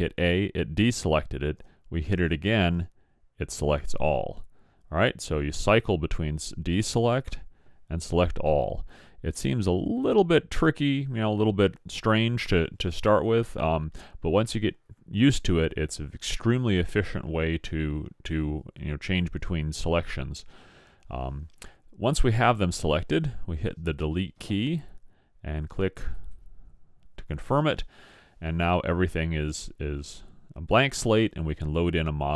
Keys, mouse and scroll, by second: 1.6 a, 5.6 a, 7.2 a, 23.5 Delete.